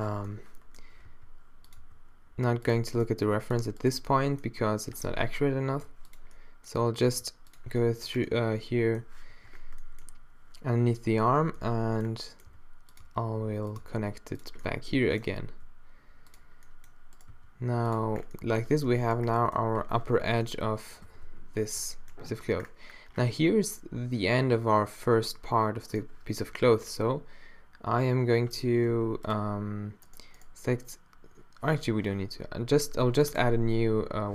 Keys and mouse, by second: 0.1 z, 1.1 g, 1.8 e, 3.0 g, 4.1-5.7 drag, 4.6 e, 5.7 g, 7.1 e, 9.4 z, 11.4 z, 12.5 e, 13.0 e, 13.9 e, 15.5 e, 17.3 click, 17.3 g, 18.7 Tab, 19.8 Tab, 20.1 z, 21.1 a, 21.3 a, 26.7 shift+d, 28.9 x, 31.8 z, 32.4 middle click, 33.3-34.3 drag.